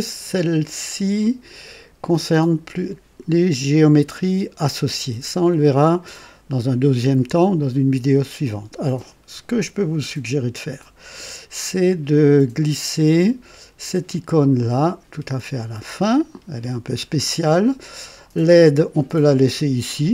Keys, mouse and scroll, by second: 14.6-16.5 drag.